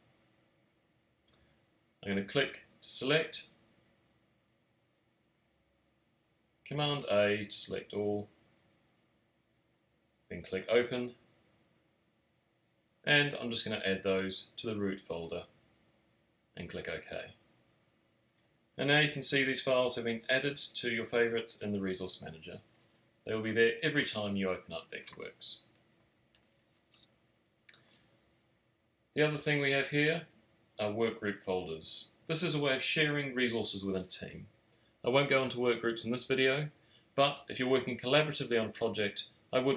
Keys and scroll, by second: 8.7 super+a.